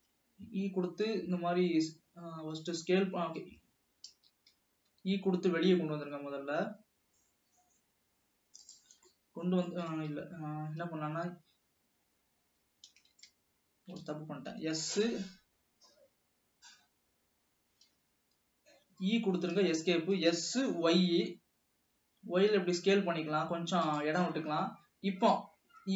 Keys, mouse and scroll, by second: 1.1 s, 4.4 ctrl+z, 5.1 e, 9.2-10.2 middle drag, 10.2 ctrl+z, 13.1 ctrl+z, 14.6 s, 19.1 e, 20.3 s, 24.7 e.